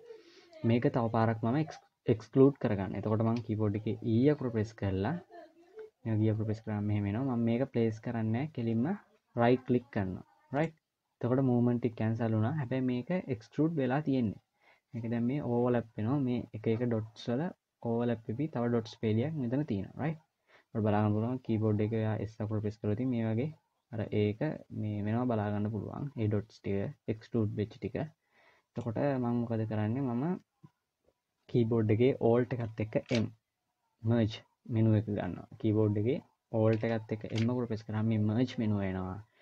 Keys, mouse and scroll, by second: 3.9 e, 32.8 alt+m, 37.0 alt+m.